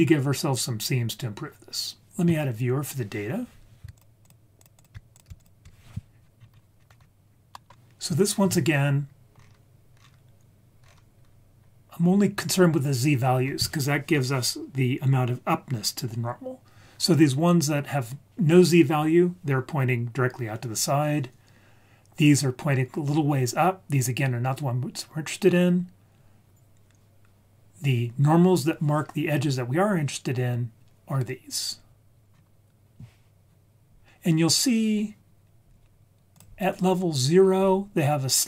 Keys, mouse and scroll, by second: 3.9 shift+click, 4.8 shift+click, 5.4 ctrl+shift+click, 6.4 scroll down 5, 6.8-7.5 scroll up 3, 7.5 middle click, 7.5 scroll up 2, 9.3 scroll up 2, 10.0 scroll up 2, 10.8-11.2 scroll up 3, 11.2-12.3 scroll down 4, 26.0-26.8 scroll down 4, 31.3-32.3 scroll down 6, 32.3-33.4 scroll up 1, 33.4 scroll up 2, 36.3 click, 37.2 scroll down 2.